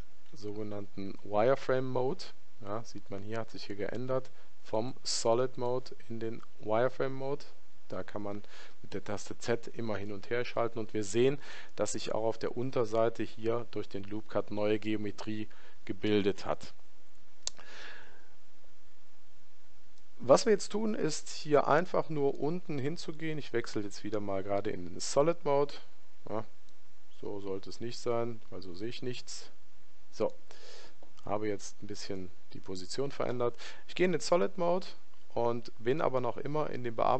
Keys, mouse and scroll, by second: 0.4 z, 4.8 click, 6.3 z, 10.5-25.2 middle drag, 25.2 z, 26.8-28.7 middle drag.